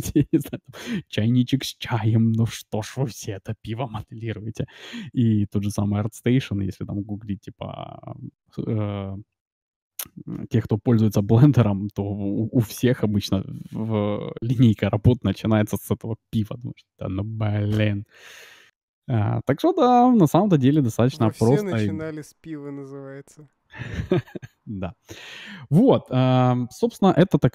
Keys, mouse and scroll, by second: 20.7-22.7 middle drag.